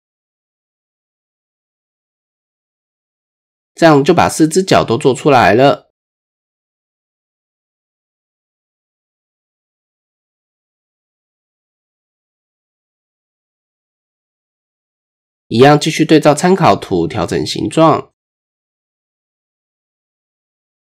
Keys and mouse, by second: 1.8-3.5 middle drag, 3.9-5.4 middle drag, 5.7 middle click, 7.3 KP_1, 8.7 shift+middle click, 9.2 Tab, 9.8 shift+drag, 11.4 Tab, 12.0-12.4 shift+drag, 15.7 right click, 16.5 right click, 16.9 Tab, 17.4 shift+click, 17.8 Tab, 18.2 shift+drag, 18.3 shift+middle click, 18.6 middle drag, 19.0 shift+drag, 19.6 click, 20.4-20.9 drag.